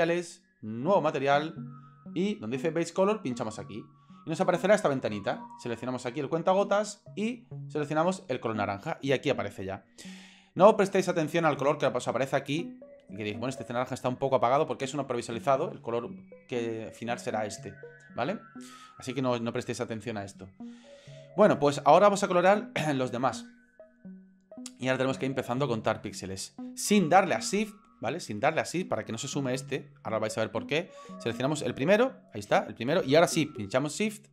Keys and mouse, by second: 0.9 click, 3.3 click, 31.5 right click.